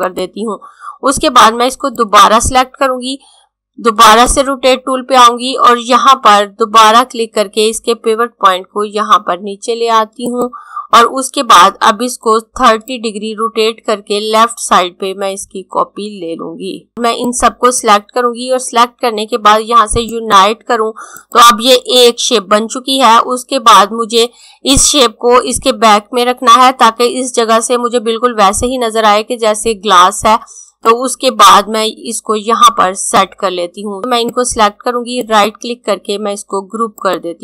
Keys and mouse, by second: 9.8 click, 12.4 click, 30.3 click, 35.3 right click, 37.0 click.